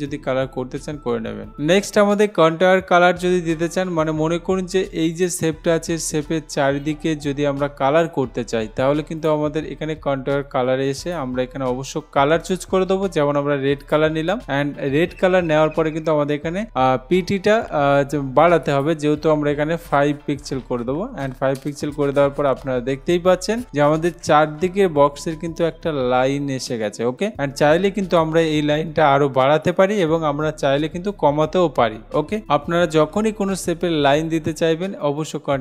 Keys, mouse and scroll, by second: 5.4 click, 9.5 click, 11.3 click, 14.1 click, 18.6 click, 20.9 5, 21.8 Return, 23.7 click, 28.3 click.